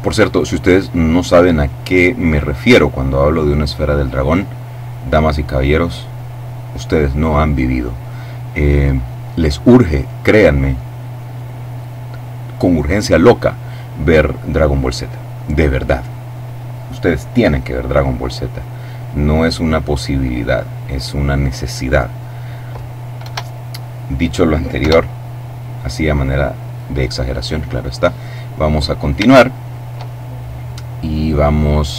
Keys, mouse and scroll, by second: 3.3 click, 5.2 click, 10.0-10.9 scroll up 2, 12.4-13.0 scroll up 2, 14.8 click, 17.8 click, 18.9 click, 20.2 click, 23.2 KP_0, 24.7 KP_0, 25.4-26.5 middle drag, 26.6 middle click, 29.2 shift+middle click, 30.1-30.8 shift+scroll up 1.